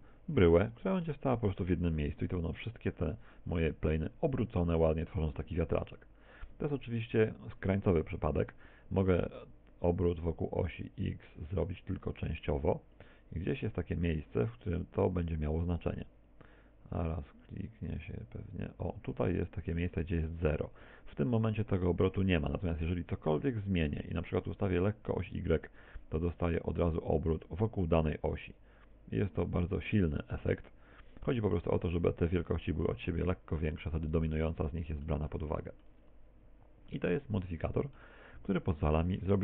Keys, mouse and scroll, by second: 2.0 middle click, 2.9-3.3 scroll up 2, 3.6-5.3 scroll up 10, 9.3 click, 24.7 click, 33.3-33.9 scroll down 1, 34.5 middle click, 35.3 shift+middle click, 36.1 scroll down 1, 37.0 middle click.